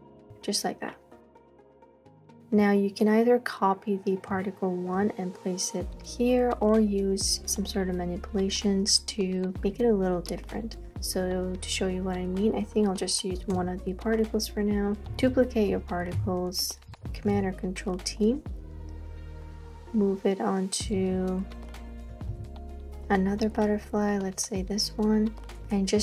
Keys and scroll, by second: 0.1 space, 0.2 space, 13.6 BackSpace, 15.1 super+j, 17.1 super+t, 21.0 super+z, 22.3 super+t, 25.7 Return.